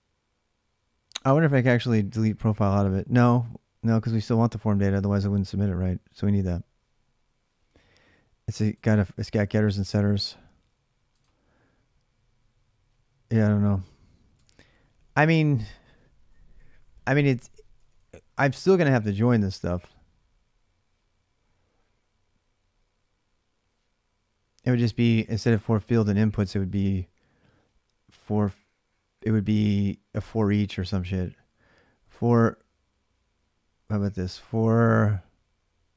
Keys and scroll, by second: 14.1 alt+Tab, 17.6 ctrl+[, 17.7-18.1 k, 24.4 j, 24.6 j, 29.2-29.5 h, 31.6 l, 31.8 l, 35.8 h.